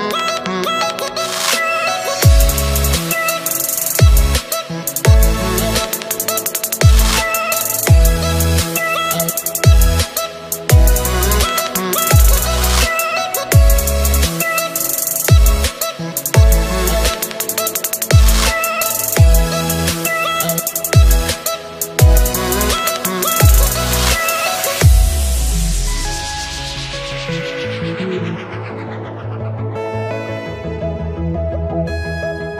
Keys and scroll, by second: 3.7 ctrl+z, 10.8 ctrl+z, 24.9 ctrl+z.